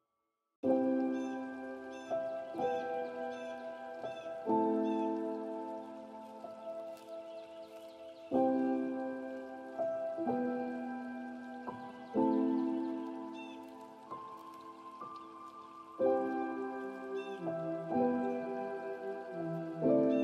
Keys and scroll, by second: 18.8 ctrl+alt+s.